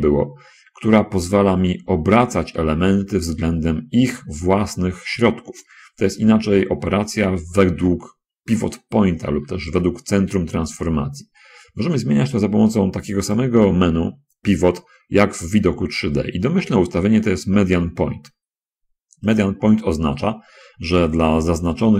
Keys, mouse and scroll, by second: 5.6 Escape, 8.5-9.9 shift+middle drag, 13.6 click, 19.7 click.